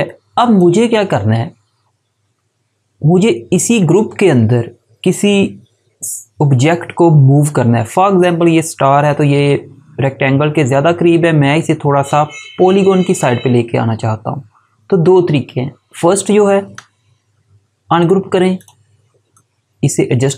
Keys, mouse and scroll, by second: 0.2 click, 16.6 right click, 17.9 click.